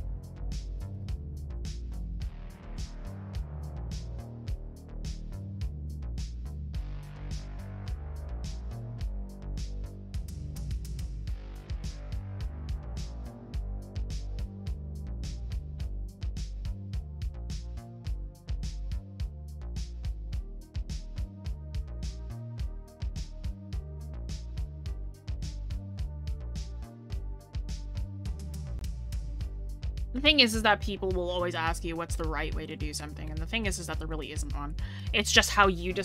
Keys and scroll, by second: 8.6 scroll.